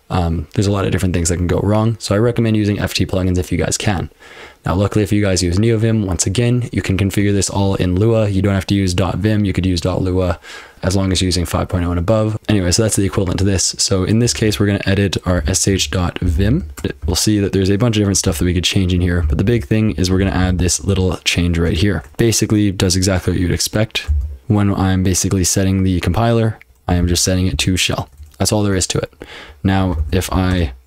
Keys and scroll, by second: 12.3 ctrl+w, 14.2-22.2 typing, 24.1 m, 24.4 ctrl+g, 24.4 ctrl+[, 26.6-27.5 typing, 28.2 ctrl+[, 30.0 :, 30.2 q, 30.5 Return.